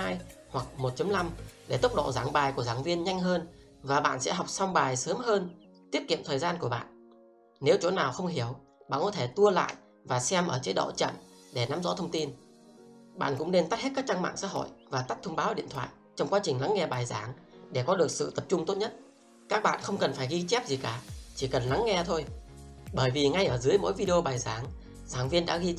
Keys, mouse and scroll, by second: 2.2 click.